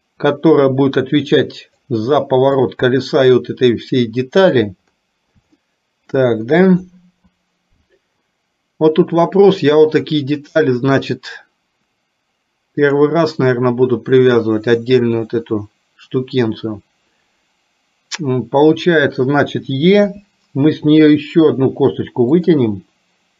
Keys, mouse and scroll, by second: 2.8-4.7 drag, 5.7 shift+middle click, 20.2 e.